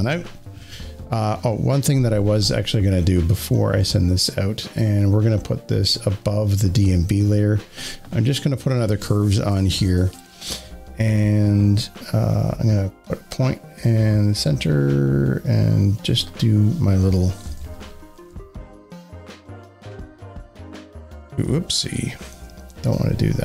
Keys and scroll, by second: 17.3 Up, 22.2 ctrl+z.